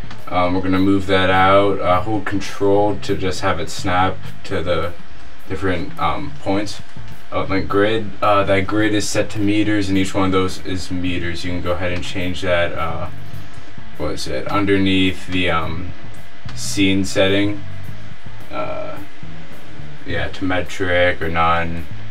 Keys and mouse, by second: 0.2-1.0 drag, 1.8 click, 12.2-14.3 drag, 14.8-16.7 drag, 18.4-22.1 middle drag.